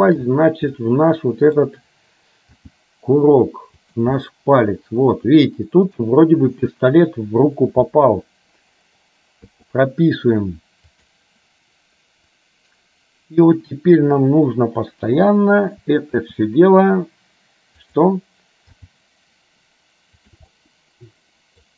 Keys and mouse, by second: 0.9 middle click, 2.7 g, 4.4-6.1 middle drag, 11.1 click, 11.1 i, 15.1 KP_7, 16.5 r, 18.9 g, 20.6-21.7 middle drag.